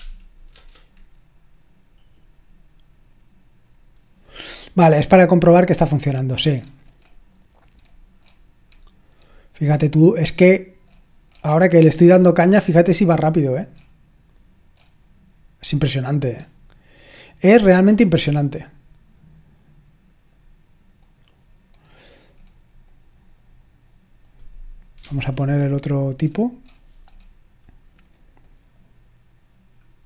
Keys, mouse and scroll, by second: 0.5 Return, 5.8-9.8 scroll up 1, 9.8-10.3 scroll up 1, 17.8-18.6 scroll up 1, 18.6-20.4 drag, 20.7-21.9 drag, 21.9-22.9 scroll down 2, 22.9-23.8 drag, 25.0 c, 25.6-26.2 scroll down 1, 26.2-28.2 scroll up 1, 28.4 click, 29.8-30.0 scroll down 1.